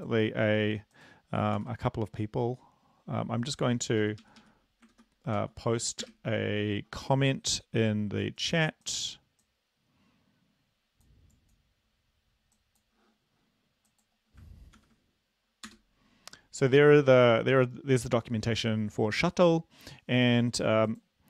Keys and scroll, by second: 1.8 ctrl+v, 4.2 Up, 4.7 Up, 6.0 ctrl+a, 6.4 BackSpace, 15.2 ctrl+v, 15.7 Return.